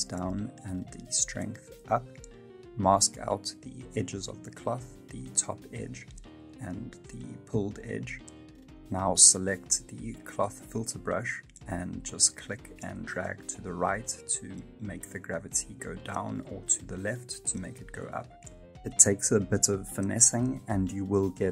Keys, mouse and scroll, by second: 0.2 f, 1.8 click, 3.2 click, 3.2 middle click, 4.0 click, 9.5 click, 10.4 click, 11.8 middle click, 11.8 click, 12.4 click, 16.1 middle click, 17.3 ctrl+z, 17.8 click, 20.2 middle click.